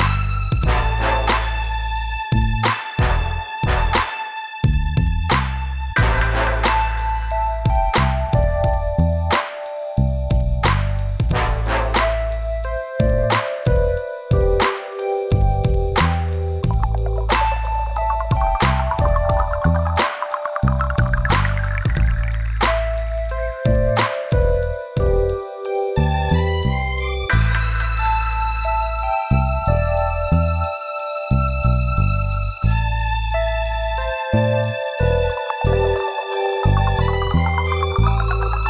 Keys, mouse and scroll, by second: 0.5 b, 1.1 scroll down 2, 4.2 click, 5.3 scroll up 2, 6.8 click, 6.9 click, 8.6 click, 8.7 click, 9.7 click, 9.8 click, 10.9 click, 11.0 click, 11.7 scroll up 2, 12.1 right click, 13.5 click, 15.0 click, 16.9 click, 17.2 click, 17.5 click, 18.8 right click, 19.1 right click, 21.6 middle click, 22.5 scroll up 2, 22.7 right click, 22.9 right click, 24.6 click, 24.7 click, 25.4 b, 26.0 scroll down 2, 26.7 scroll down 2, 26.8 middle click, 28.2 middle click, 28.9 scroll down 1, 29.8 middle click, 31.0 middle click, 32.2 middle click, 32.7 click, 32.8 click, 33.4 scroll up 2, 35.0 scroll down 2, 36.2 middle click, 38.0 p.